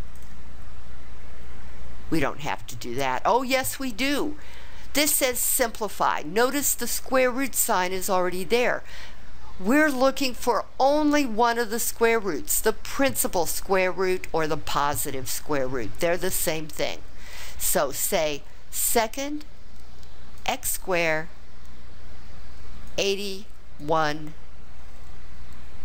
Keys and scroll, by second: 22.8 8, 23.8 1.